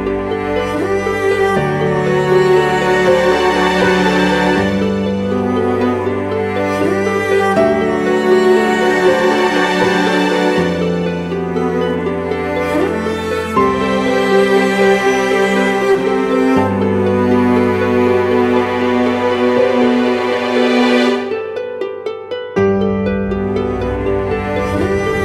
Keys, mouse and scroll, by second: 7.8 double click, 17.5-18.1 typing, 19.6 double click, 20.3 typing.